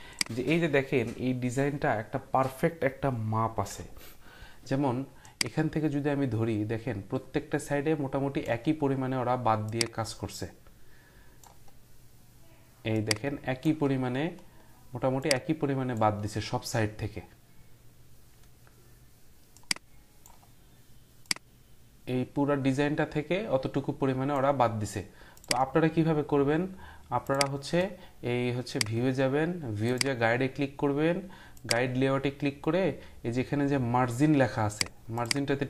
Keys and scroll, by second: 3.6 Print.